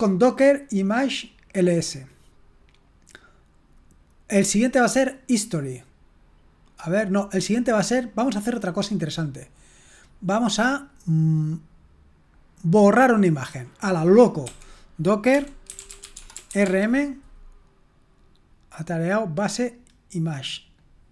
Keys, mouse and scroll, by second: 1.8-2.8 scroll up 2, 5.0-7.4 drag, 10.8-13.1 drag, 13.2-14.5 scroll down 1, 14.5-17.3 typing.